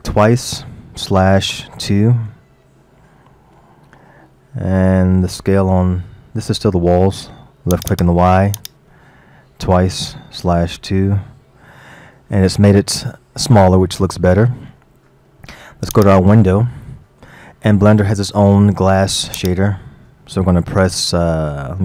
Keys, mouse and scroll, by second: 1.7-3.8 drag, 3.8-4.5 scroll up 3, 7.8 click, 12.1-12.5 scroll down 3, 12.5-13.7 middle drag, 13.7 scroll up 1, 14.0-16.0 middle drag, 16.0 click, 16.8-19.4 middle drag, 19.4 click.